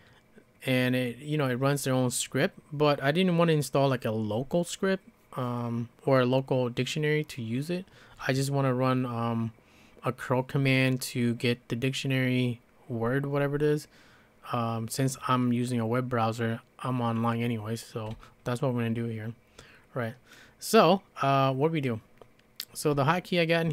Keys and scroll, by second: 22.9 j, 23.4 j, 23.5 j.